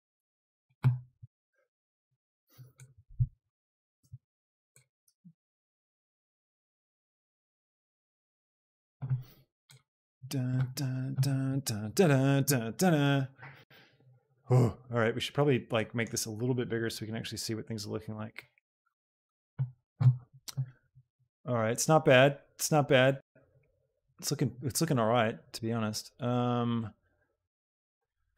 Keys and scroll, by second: 0.3 x, 1.4 KP_0, 3.2 shift+d, 3.9 x, 5.0 g, 5.4 y, 6.5 x.